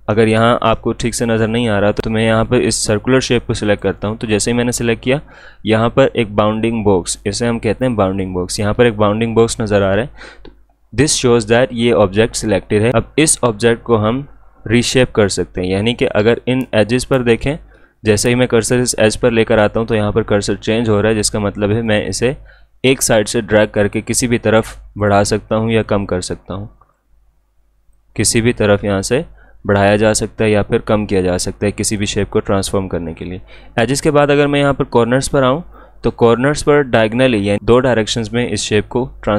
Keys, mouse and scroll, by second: 3.6 click, 12.9-15.1 drag, 20.6-34.3 drag, 35.7-39.3 drag.